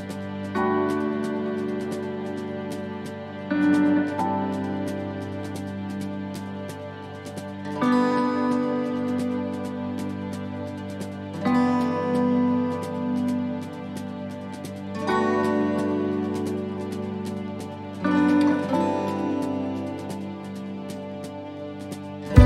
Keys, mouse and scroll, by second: 4.8 click, 10.1 scroll up 1, 10.6 middle click, 10.6-11.1 scroll up 3, 11.1 scroll down 1, 11.8-12.4 scroll down 2, 12.4 shift+d, 13.9 click, 16.8 shift+middle click, 17.4-18.4 scroll up 2, 18.6 shift+middle click, 19.1-19.5 scroll up 2, 19.5 shift+middle click, 20.5 shift+middle click, 21.0-21.6 scroll down 10, 21.6 shift+middle click.